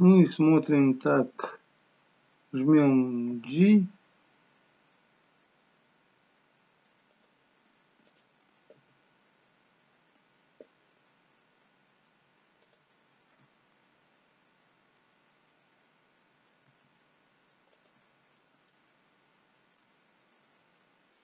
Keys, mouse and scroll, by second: 1.0-2.4 scroll down 2, 3.2 g, 8.0 click, 8.8 g, 16.8 r, 18.6 shift+middle click.